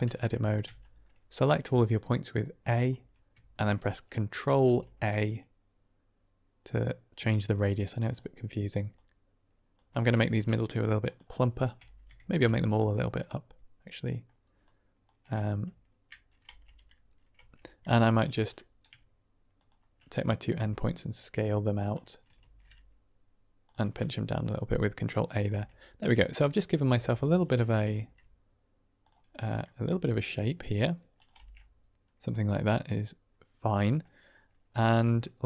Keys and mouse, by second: 0.5 a, 4.4 ctrl+a, 7.9 click, 8.3 middle click, 8.9 click, 10.1 ctrl+a, 10.9 click, 11.7 a, 12.8 click, 13.2 middle click, 14.5 click, 16.4 Tab, 17.3 Tab, 18.0 click, 18.4 middle click, 20.4 s, 21.7 click, 22.5 ctrl+a, 23.5 click, 24.0-25.3 middle drag, 25.5 Tab, 26.4 middle click, 27.0 Tab, 27.2 click, 27.9 ctrl+a, 28.9 click, 29.2 middle click, 29.8 s, 31.1 click, 31.3 Tab, 31.7-33.9 middle drag.